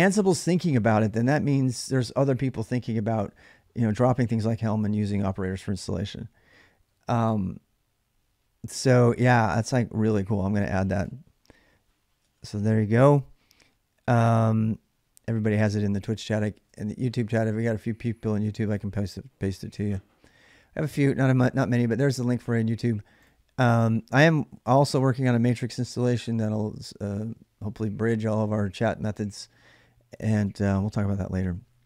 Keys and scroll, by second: 10.5-11.3 typing, 11.9 Return, 13.7-17.8 typing, 24.3-24.8 typing, 29.8-31.0 typing.